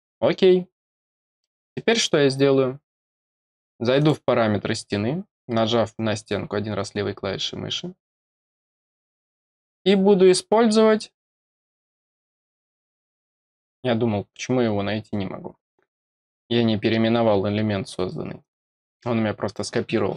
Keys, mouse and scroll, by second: 1.3 middle click, 3.9 click, 8.4 click, 11.7 scroll down 2, 12.0 scroll up 2, 18.3 click.